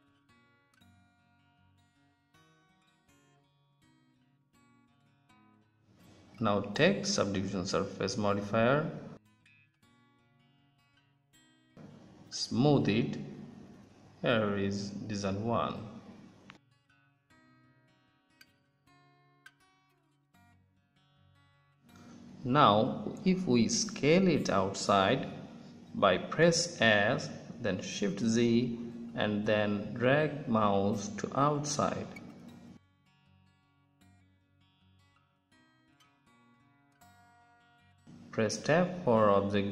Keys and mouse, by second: 1.6 Tab, 2.1-4.3 drag, 7.6-9.4 drag, 12.7-13.5 drag, 13.5-13.8 middle drag, 13.8-14.6 drag, 18.5-20.3 drag, 22.1 Tab, 26.4 s, 38.3 Tab, 39.0-39.6 middle drag.